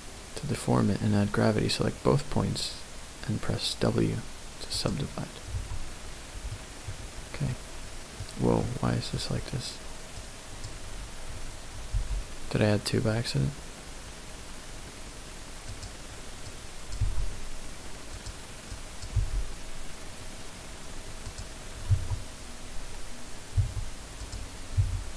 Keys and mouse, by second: 5.6 Tab, 6.7 middle click, 7.5 middle click, 8.0 middle click, 8.6 middle click, 10.2 click, 12.0 g, 16.4 click, 17.0 g, 18.1 click, 18.7 click, 19.2 g, 21.3 click, 21.9 q, 24.7 w.